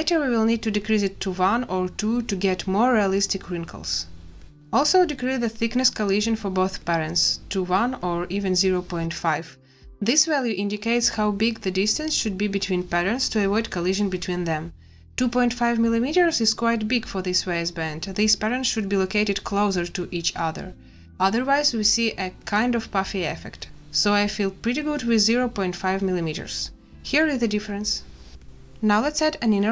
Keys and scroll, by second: 8.7 a, 22.4 ., 23.1 5, 23.5 Return, 29.3 space.